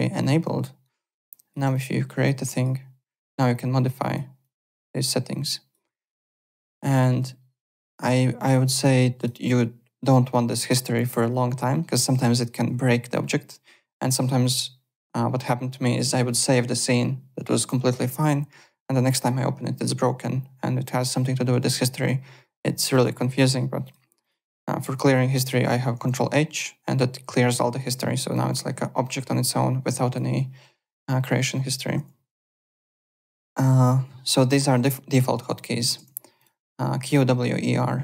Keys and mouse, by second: 0.8 right click, 1.7 click, 2.2 click, 3.5 click, 4.4 click, 6.4 click, 8.7 click, 23.8 click, 25.9 ctrl+h, 28.2 click, 32.0 alt+Tab, 34.6 click, 35.4 click, 36.0 alt+Tab, 36.3 alt+click.